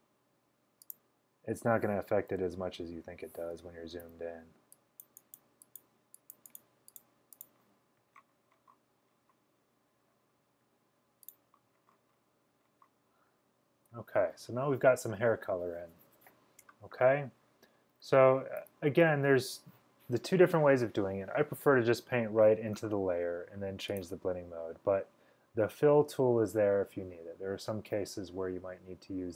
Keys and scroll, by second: 2.4-3.0 typing, 4.1 x, 18.7 v.